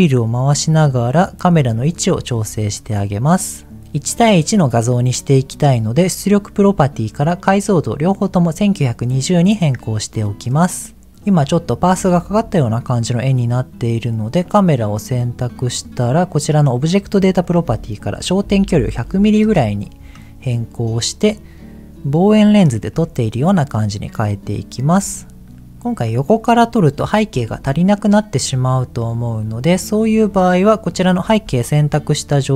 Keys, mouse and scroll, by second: 0.4-1.0 scroll down 2, 1.7 shift+middle click, 2.5 click, 3.1 middle click, 6.0 click, 7.1-8.8 drag, 14.4 click, 15.7 click, 17.4-19.4 drag, 18.9 KP_0, 23.0 ctrl+middle click, 25.2 shift+middle click, 28.3 click, 28.9-29.6 scroll down 4, 29.6 middle click, 30.2-30.7 scroll down 3.